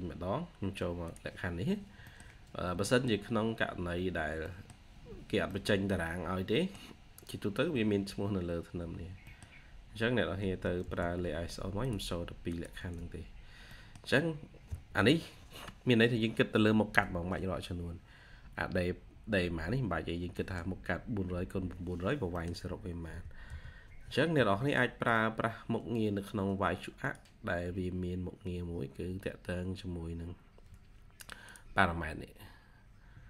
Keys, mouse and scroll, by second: 1.7 scroll down 1, 1.9 middle click, 2.5 scroll down 1, 2.8 middle click, 3.2 scroll up 1, 4.0 scroll down 1, 4.4 middle click, 5.1 scroll up 1, 5.4 middle click, 6.0-6.5 scroll down 1, 6.5 middle click, 7.2-7.8 scroll up 1, 9.2 middle click, 9.4 scroll down 1, 10.3 1, 13.3-13.6 scroll down 1, 13.6 middle click, 14.6 scroll up 1, 16.0-16.7 scroll up 1, 18.5-19.5 scroll up 1, 20.2 middle click, 21.4 scroll down 1, 22.3 middle click, 22.9 typing, 24.2 Escape.